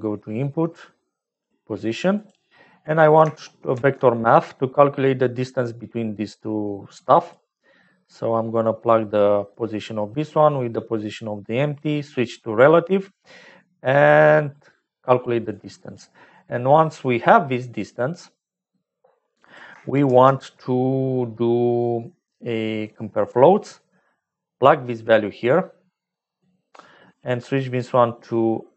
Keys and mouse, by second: 3.6 shift+a, 8.8 click, 10.3 click, 13.1-14.6 drag, 15.5 click, 17.5 click, 19.4 click, 20.0 shift+a, 24.6-27.1 drag, 27.4-28.7 drag.